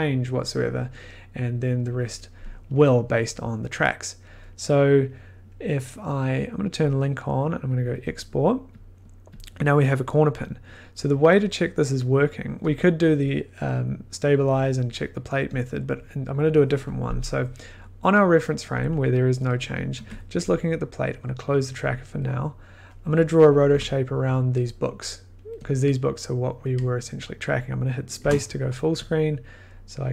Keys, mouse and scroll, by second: 0.5-1.9 middle drag, 6.8-8.2 drag, 9.0 click, 10.7 middle click, 11.8 click, 11.9 middle click, 12.2 middle click, 12.7 click, 19.9 1, 21.1 click, 22.5 click, 22.6 middle click, 23.6 click, 23.7 o, 25.7 click, 25.8 scroll, 29.7 middle click.